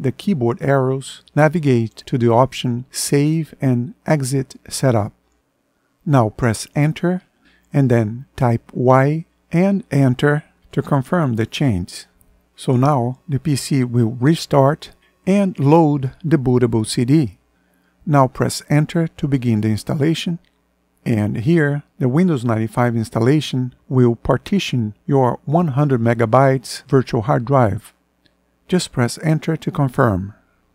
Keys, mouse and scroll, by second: 0.0 Down, 6.3 Return, 8.5 y, 10.0 Return, 18.2 Return, 28.9 Return.